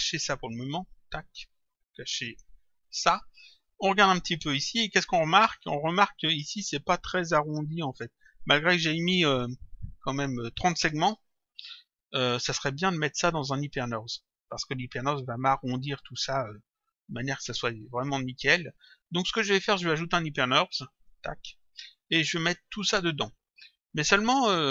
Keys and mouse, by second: 0.8 click, 2.9 click, 5.7 click, 15.0 click, 19.4 click, 21.0 click.